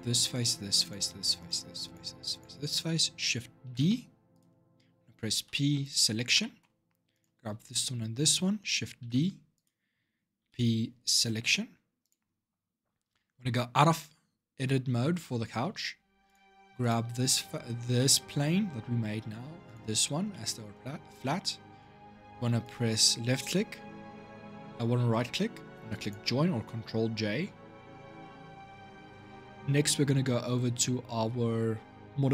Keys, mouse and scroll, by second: 0.1 shift+click, 0.6 shift+click, 1.2 shift+click, 1.6 shift+click, 2.1 shift+click, 3.4 shift+d, 5.1 p, 6.2 shift+middle click, 6.9 click, 7.5 shift+click, 8.8 shift+d, 10.2 p, 11.8 click, 15.4 Tab, 16.0 click, 16.6 click, 17.7-19.4 middle drag, 19.4 shift+click, 20.1-22.4 middle drag, 22.4-25.5 right drag, 28.0-31.4 shift+middle drag.